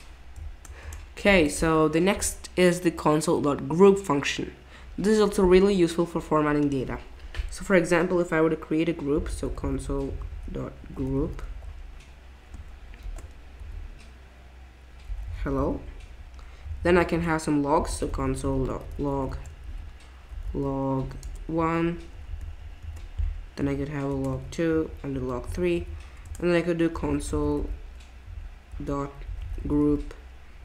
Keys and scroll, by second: 0.5 Return, 0.8 Return, 1.3 BackSpace, 8.9-12.0 typing, 13.0 shift+9, 14.8-21.5 typing, 22.4 alt+shift+Down, 22.8 alt+shift+Down, 24.1 BackSpace, 24.3 BackSpace, 24.7 Page_Down, 25.1 BackSpace, 25.5 BackSpace, 25.7 Page_Down, 26.2 Return, 26.7-30.3 typing.